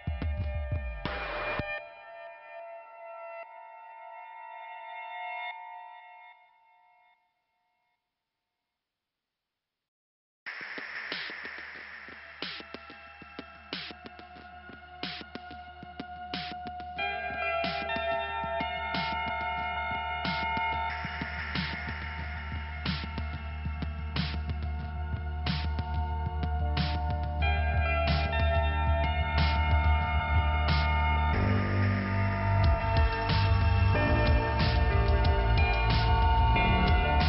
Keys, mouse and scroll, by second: 0.9 click, 1.0 click, 2.0 middle click, 3.5 middle click, 4.2 middle click, 8.7 click, 9.2 right click, 9.9 click, 11.1 click, 11.6 click, 12.3 right click, 14.3 click, 15.9-16.8 scroll down 2, 19.7 click, 22.5-23.6 scroll up 1, 23.9 click, 25.0 click, 26.5-27.1 scroll down 1, 29.3-29.8 scroll up 2, 30.5 middle click, 36.9 click.